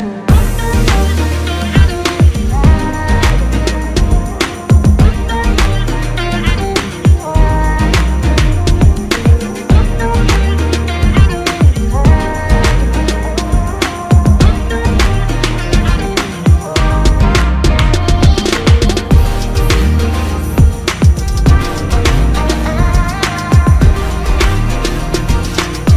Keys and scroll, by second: 6.0 typing, 9.1-9.5 typing, 10.9-11.7 typing, 20.2 ctrl+KP_Subtract, 20.8 typing.